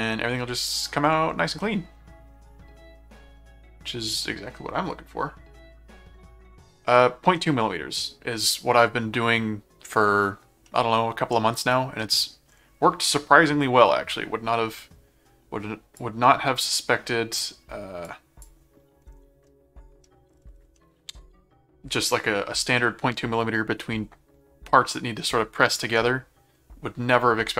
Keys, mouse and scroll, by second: 0.0 middle click, 1.6-4.2 middle drag, 6.9 middle click, 10.6 middle click, 12.0 middle click, 16.0 click, 18.0 click, 19.5 middle click, 20.8 middle click.